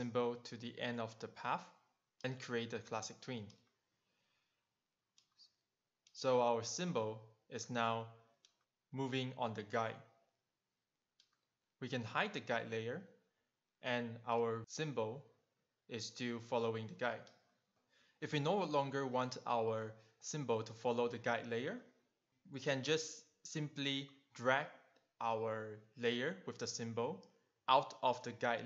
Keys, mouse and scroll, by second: 1.9 click, 2.3 right click, 2.5 double right click, 3.5 click, 10.3 click, 11.4 click, 13.8 click, 14.7 click, 15.8 click, 23.5 click, 24.6 click, 26.0 click.